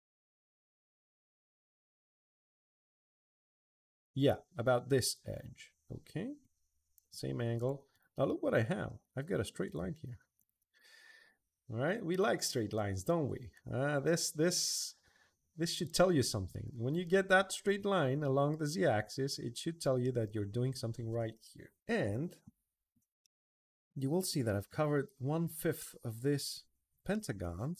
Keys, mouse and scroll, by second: 7.3 click, 7.7 click, 8.0-8.6 middle drag, 9.4 click, 10.1 shift+click, 10.5-17.9 middle drag, 18.7 middle click, 19.3 middle click, 19.8-20.7 middle drag, 23.0-24.1 middle drag, 24.1 middle click, 24.4 middle drag, 24.8 middle click, 26.9-27.7 middle drag.